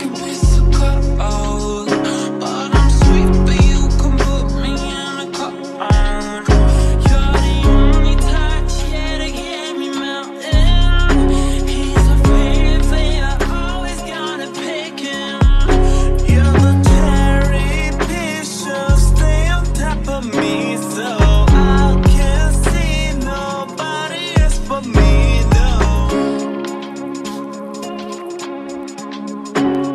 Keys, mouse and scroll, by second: 9.7 ctrl+a, 10.4 Delete, 13.2-16.0 typing, 17.0 BackSpace, 17.4 BackSpace, 18.6 BackSpace, 18.9 BackSpace, 19.2 BackSpace, 20.7-22.7 typing.